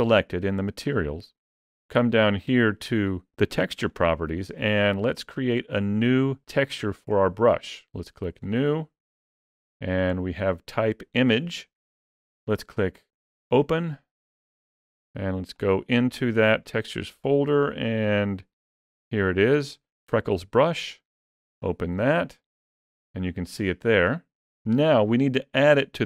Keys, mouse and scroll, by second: 3.7 click, 8.2 click, 13.3 click.